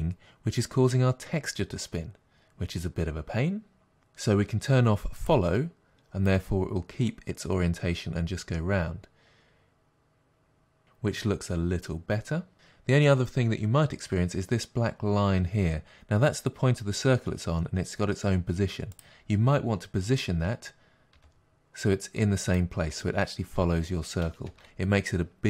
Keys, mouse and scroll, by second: 3.9-5.9 drag, 6.3-19.0 drag, 21.2 g, 22.6 click, 24.5 space.